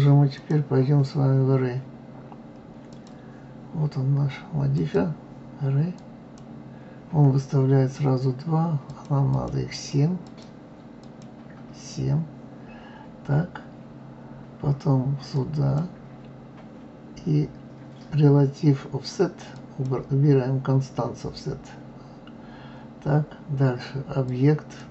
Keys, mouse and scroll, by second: 0.3 click, 2.9 click, 4.7-7.8 drag, 8.8-11.7 drag, 15.3 click, 19.5 click, 24.3 click.